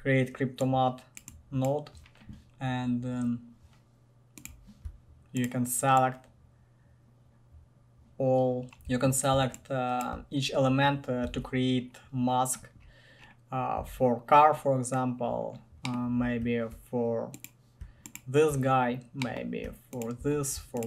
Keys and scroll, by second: 11.4 ctrl+alt+a, 14.0 ctrl+alt+a.